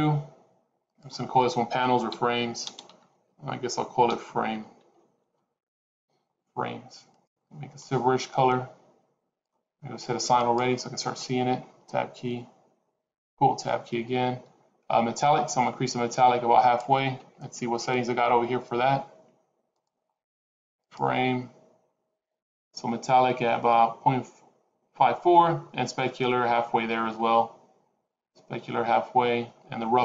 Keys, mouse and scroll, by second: 0.8 click, 7.1 click, 10.3 click, 11.6 Tab, 13.0 Tab, 15.1 click, 28.2-29.6 scroll down 1.